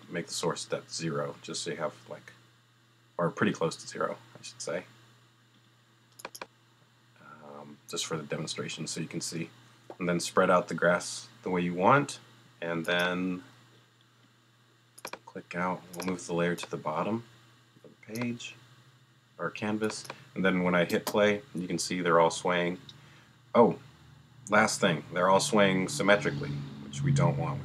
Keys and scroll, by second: 20.9 space.